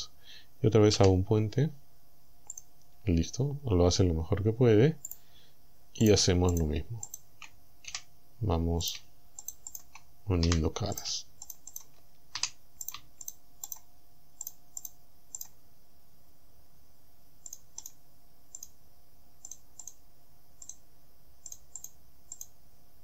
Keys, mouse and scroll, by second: 1.0 w, 2.6 click, 3.3-3.6 scroll up 2, 5.1 click, 6.1 shift+right click, 6.6 shift+right click, 7.1 shift+right click, 7.9 f, 8.9 shift+right click, 9.5 shift+right click, 10.5 f, 11.0 shift+right click, 11.5 shift+right click, 11.8 shift+right click, 12.4 f, 12.9 shift+right click, 13.3 shift+right click, 13.7 shift+right click, 14.5 shift+right click, 14.8 shift+right click, 15.4 shift+right click, 17.6 shift+right click, 17.9 shift+right click, 18.6 shift+right click, 19.5 shift+right click, 19.9 shift+right click, 20.7 shift+right click, 21.6 shift+right click, 21.8 shift+right click, 22.4 shift+right click.